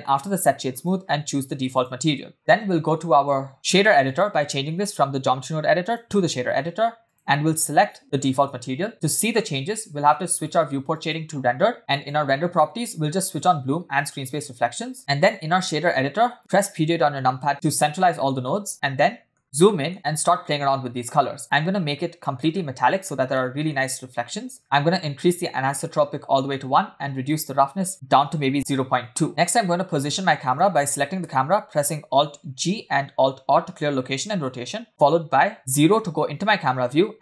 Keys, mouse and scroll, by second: 0.8-1.9 drag, 4.1-6.1 drag, 7.1 click, 7.5 click, 11.5 click, 11.9 click, 13.3 click, 14.1 click, 15.0 middle click, 15.0-15.9 scroll down 4, 16.4 KP_Decimal, 17.3 middle click, 17.5 scroll up 4, 17.6-18.0 scroll down 2, 18.0 middle click, 18.4 scroll up 1, 18.7 scroll down 1, 19.1 middle click, 19.6 middle click, 21.5 click, 23.3 middle click, 27.3-29.2 drag, 29.3 scroll down 1, 29.3 space, 29.4-29.9 scroll down 2, 30.5 click, 32.7 alt+g, 33.8 alt+r, 35.6 KP_0, 36.7 g.